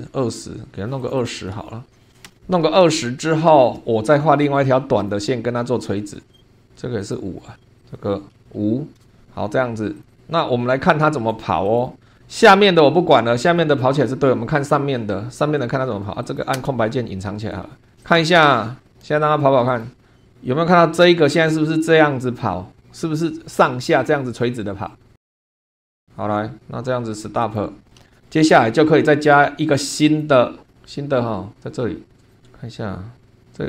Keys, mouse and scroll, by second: 0.0 super+2, 1.0 click, 1.7-2.6 typing, 3.0 shift+click, 5.0 click, 6.4 click, 7.0 click, 7.6 Escape, 7.8 click, 8.1-9.0 typing, 9.9 click, 10.4 scroll down 2, 11.6 click, 12.1 shift+click, 13.6 shift+click, 14.4 scroll up 2, 16.2 click, 16.6 space, 18.0 click, 18.8 click, 19.7 click, 27.4 click, 27.8-28.2 scroll down 1, 28.2 shift+middle click, 28.3 shift+click, 30.0 click, 30.7-31.5 scroll down 2, 32.0 scroll down 1, 32.3 click, 32.4-33.4 scroll up 3.